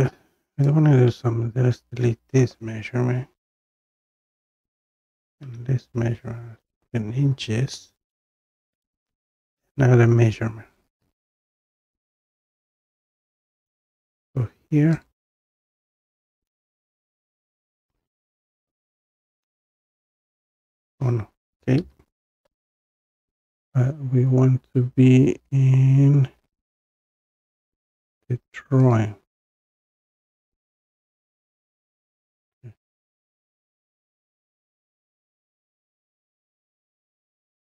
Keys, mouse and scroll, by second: 0.7 click, 1.9 Delete, 2.4-2.9 scroll down 2, 4.8 click, 5.5 Delete, 6.7 click, 6.7 scroll, 15.0-16.4 drag, 16.4-17.1 scroll down 2, 17.1 scroll, 19.1 click, 21.8 Escape, 21.8 scroll down 1, 28.9-31.5 drag, 32.4 click, 35.1-35.7 scroll down 3, 36.9 click, 37.5-37.7 scroll.